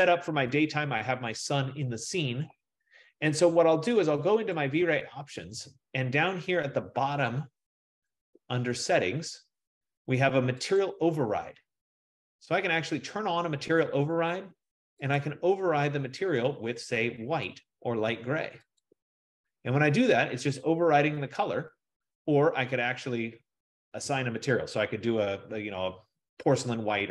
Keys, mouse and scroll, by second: 2.1 F15, 4.7 click, 8.4 click, 10.9 click.